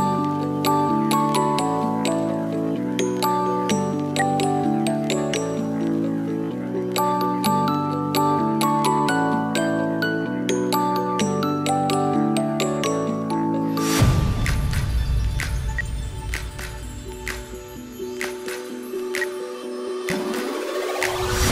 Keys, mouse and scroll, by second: 4.0 space, 5.2 double click, 15.6 space, 16.6 double click, 19.0 F2.